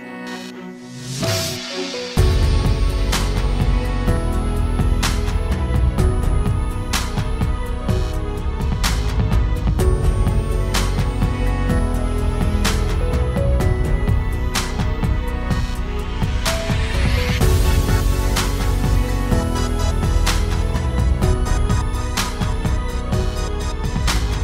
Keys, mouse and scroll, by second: 0.0-1.8 middle drag, 5.3-8.9 middle drag, 12.2-16.0 middle drag, 17.7-19.6 drag.